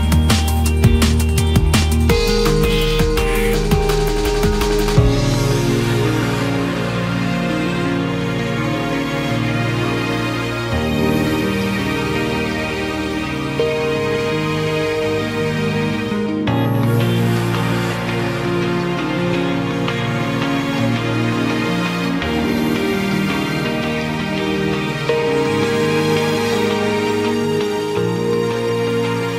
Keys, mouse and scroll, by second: 0.1 KP_1, 0.7-2.0 scroll down 8, 2.0 shift+middle click, 2.4-3.0 scroll up 2, 3.0 click, 3.4-4.1 scroll up 2, 4.1 click, 4.8 shift+click, 5.5 KP_3, 6.7 f, 7.2-9.4 right drag, 9.4-12.0 drag, 12.0-12.8 scroll up 2, 12.8 click, 13.2-13.8 shift+middle drag, 13.8-14.7 scroll up 1, 14.7 g, 16.3 click, 16.5 g, 18.1 click, 18.4 g, 19.7 click, 19.9 g, 21.8 click, 22.0 g, 23.6 click, 23.9 g, 25.1 click, 25.6 click, 25.9 g, 26.9-27.5 scroll down 1, 27.5 click, 27.7-28.1 scroll down 1, 28.1-29.1 shift+middle drag, 29.1 shift+click.